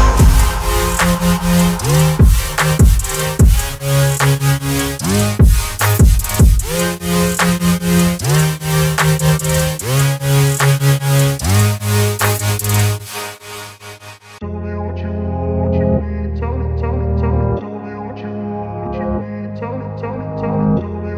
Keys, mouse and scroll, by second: 2.6 v, 3.5-3.9 alt+scroll up 1, 4.8-7.2 alt+drag, 8.3 ctrl+alt+t, 10.0-10.6 alt+drag, 17.7 ctrl+alt+0, 19.5 ctrl+alt+click.